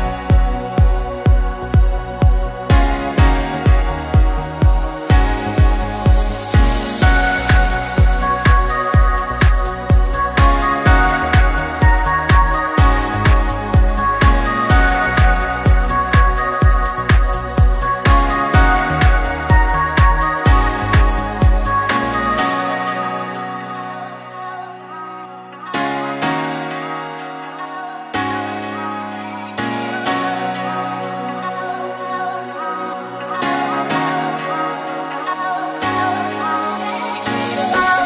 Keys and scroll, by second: 9.9 ctrl+c, 17.9 ctrl+v, 19.8 ctrl+s, 28.3 Delete, 29.1-30.0 typing, 30.6 Return, 34.2 Delete, 34.4-35.3 typing.